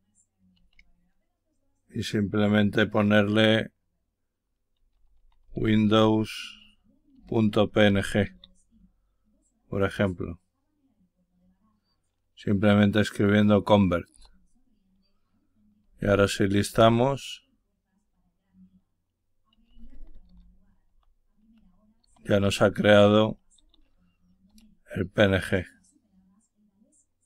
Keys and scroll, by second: 4.4-8.7 typing, 14.1 Return, 15.5-16.4 typing, 16.6 Return, 19.2-23.4 typing, 24.4 Return.